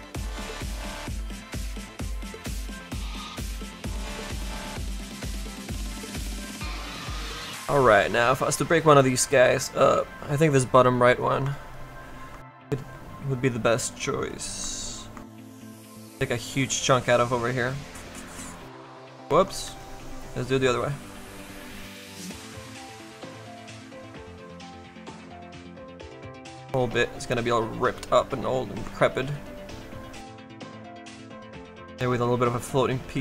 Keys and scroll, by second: 19.2 z, 19.6 s.